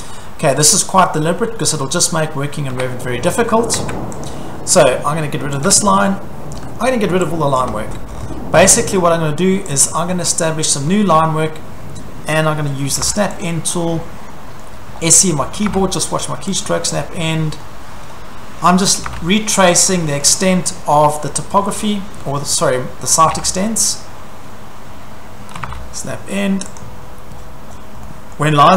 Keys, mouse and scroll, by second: 0.0 middle click, 2.0 scroll, 2.7 Caps_Lock, 3.8 Tab, 4.3 click, 4.8 click, 5.6 click, 5.7 Delete, 6.7-7.6 scroll, 7.6 click, 7.6 Delete, 8.1 scroll, 9.8 click, 10.3-11.4 scroll, 12.9 s, 13.4 click, 13.6-14.1 scroll, 14.6-15.4 scroll, 15.6 s, 16.6 click, 16.9 scroll, 17.6-18.7 scroll, 18.7-19.6 typing, 19.7 click, 20.0 scroll, 21.0-23.3 scroll, 22.1-23.7 typing, 25.6 typing, 26.8 click, 27.1-28.7 scroll.